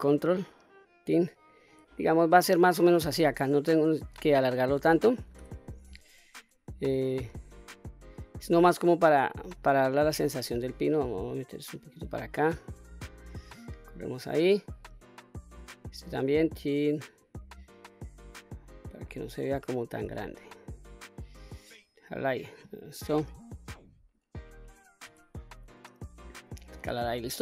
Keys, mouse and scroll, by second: 0.4 ctrl+right click, 1.7 s, 3.0 click, 3.4-4.4 scroll down 2, 4.4-5.4 scroll up 2, 5.4 q, 5.9 click, 7.1 s, 8.0 click, 8.6 click, 10.1 s, 11.9 click, 12.8-14.2 drag, 14.9 click, 16.2 s, 17.2 click, 17.8 click, 19.0 shift+middle click, 20.0 s, 21.4 click, 22.1-22.7 scroll down 1, 22.7-23.8 scroll down 1, 23.8 click, 25.1 s, 26.3 click, 26.7 scroll down 1, 27.1 middle click.